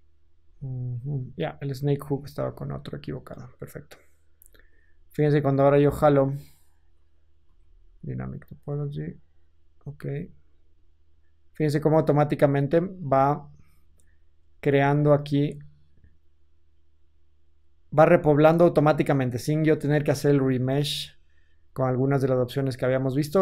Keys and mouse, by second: 0.3 f, 0.9-2.1 middle drag, 2.1-4.6 drag, 4.2 f, 4.6 middle click, 5.1-23.4 drag, 7.4 ctrl+z.